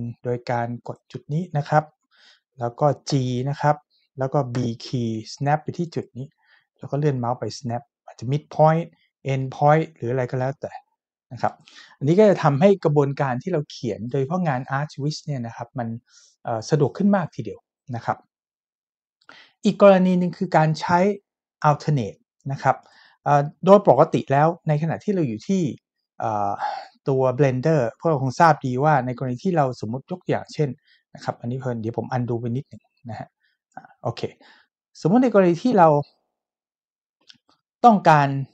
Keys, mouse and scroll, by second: 0.9 click, 3.1 g, 4.5 b, 6.0 click, 11.5 click, 22.8 click, 29.4 shift+middle click, 32.3 ctrl+z, 37.2-38.5 shift+middle drag.